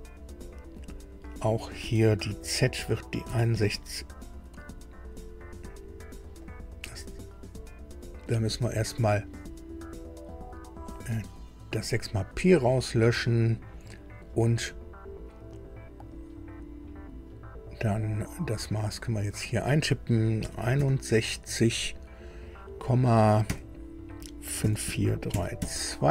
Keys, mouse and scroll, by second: 3.2 KP_6, 3.5 KP_1, 6.4 click, 10.9 click, 13.2 click, 19.3 click, 20.4 KP_6, 20.8 KP_1, 23.4 KP_Decimal, 24.6 KP_5, 24.8 KP_4, 25.3 KP_3, 25.6 KP_2.